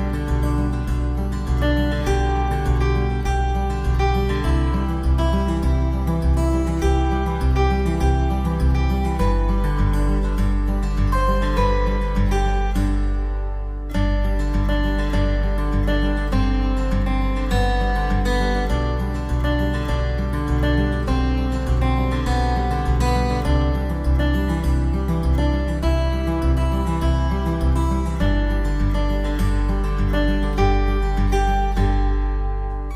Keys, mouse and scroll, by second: 0.2 scroll up 1, 0.7 click, 1.2 alt+w, 1.5 click, 2.2 click, 2.5 shift+click, 2.7 shift+click, 3.7 click, 4.5 click, 4.8 middle click, 4.8 scroll up 1, 4.8 alt+w, 5.2 alt+middle click, 5.5 right click, 5.8 click, 6.4 alt+middle click, 6.6 alt+w, 6.9 F3, 7.0 scroll up 1, 7.2 middle click, 7.4 middle click, 7.7 click, 8.2 middle click, 8.3 middle click, 8.3 scroll up 1, 8.6 typing, 8.9 shift+click, 9.1 scroll up 1, 9.4 shift+click, 9.9 scroll up 1, 10.0 F3, 10.1 middle click, 10.3 click, 10.6 click, 10.8 click, 11.1 click, 11.2 click, 11.2 click, 11.3 click, 11.3 scroll up 1, 11.4 click, 11.5 click, 11.6 click, 11.7-12.3 scroll down 2, 11.8 middle click, 11.8 click, 11.8 click, 12.0 click, 12.1 click, 12.1 click, 12.3 click, 12.3 click, 12.4 click, 12.5 click, 12.6 click, 12.8 click, 12.9 click, 13.0 click, 13.1 double right click, 13.1 click, 13.2 click, 13.3 click, 13.4 middle click, 13.5 s, 13.7 click, 13.7 scroll up 1, 13.8 click, 13.9 click, 14.1 click, 14.2 click, 14.3 click, 14.4 middle click, 14.4 scroll down 1, 14.5 click, 14.7 middle click, 14.8 click, 14.9 click, 14.9 typing, 15.3 click, 15.4 middle click, 15.5 click, 15.7 ctrl+z, 15.9 F3, 16.1 click, 16.3 click, 16.4 click, 16.6 click, 16.8 click, 16.9 click, 17.0 click, 17.2 click, 17.4 click, 18.1 click, 19.9 click, 20.0 click, 20.2 click, 21.0 click, 21.5 click, 21.7 click, 22.7 middle click, 22.7 scroll down 1, 23.1 shift+click, 23.3 shift+click, 23.9 scroll up 1, 24.2 s, 24.5 click, 24.7 click, 26.2 middle click, 26.5 click, 27.4 double middle click, 28.0 click, 28.3 click, 28.3 click, 29.3 Down, 29.6 click, 29.9 click, 30.1 click, 30.1 Down, 30.9 click, 31.3 click, 31.4 click, 31.8 click, 32.1 click, 32.4 click.